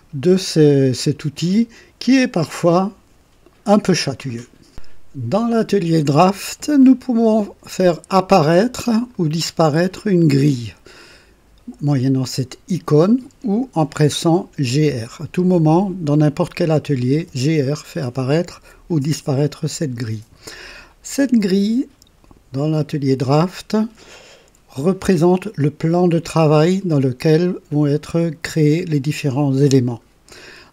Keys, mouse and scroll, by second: 4.7 click, 8.1 click, 9.1 click, 9.9 click, 14.4-15.4 typing, 16.7-17.6 typing, 20.8-22.2 drag.